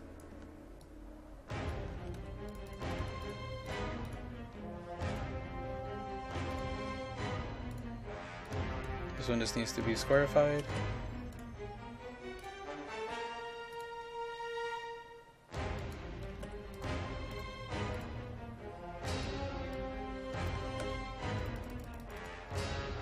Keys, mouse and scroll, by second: 0.4 KP_0, 0.9 click, 1.9 KP_1, 2.0 KP_2, 2.3 KP_5, 2.6 click, 10.5 KP_0, 10.7 KP_Decimal, 10.9 KP_5, 11.4-13.5 drag, 16.1 KP_0, 16.4 KP_Decimal, 16.5 KP_5, 16.8 click, 20.6 KP_1, 20.8 KP_2, 21.0 KP_5, 21.5 click.